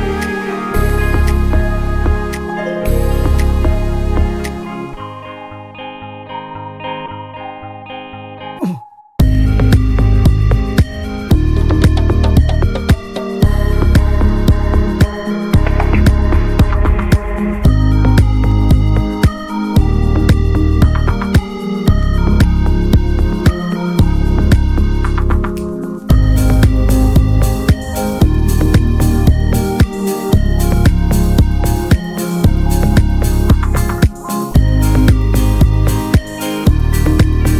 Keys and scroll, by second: 3.4 v.